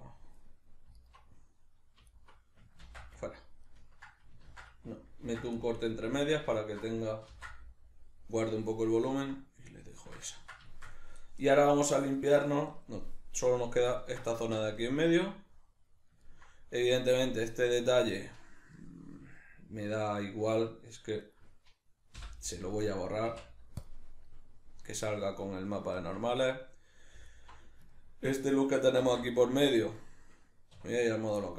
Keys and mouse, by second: 1.0 alt+right click, 2.1 alt+right click, 2.8 ctrl+x, 3.2-5.8 ctrl+middle drag, 4.4 ctrl+z, 6.2 alt+right click, 6.6 alt+shift+right click, 7.3 ctrl+x, 8.7-21.3 ctrl+middle drag, 21.3 right click, 22.2 l, 23.0-27.3 middle drag, 23.3 x, 27.3 alt+right click, 27.9-31.5 ctrl+middle drag, 29.0 ctrl+x, 30.8 \.